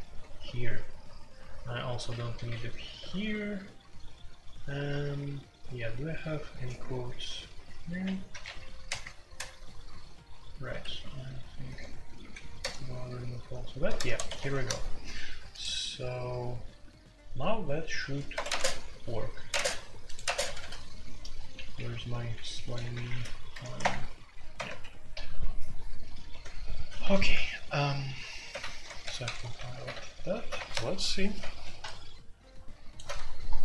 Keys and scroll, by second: 0.3-3.9 typing, 5.6-6.9 typing, 7.9-9.3 typing, 8.8 Return, 10.6 typing, 11.7-12.6 typing, 13.9-14.7 typing, 18.3 Escape, 18.4 space, 18.5 Tab, 19.5-20.6 typing, 19.5 Tab, 23.5 ctrl+n, 23.8 Return, 24.3-25.0 typing, 26.3 typing, 28.5 alt+1, 29.0 ctrl+c, 29.1 ctrl+c, 29.7 alt+2, 29.9 alt+p, 29.9 typing, 30.6 Return.